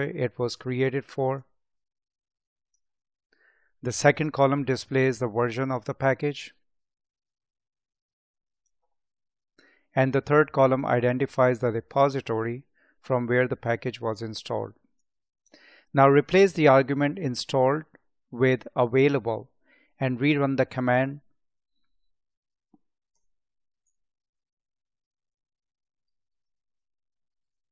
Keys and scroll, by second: 23.8 Up.